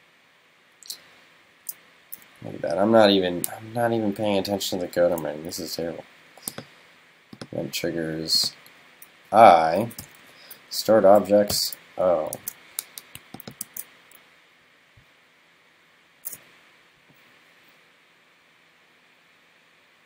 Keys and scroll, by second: 10.4 alt+Right, 12.4 super+s, 13.6 super+s, 15.6 super+s.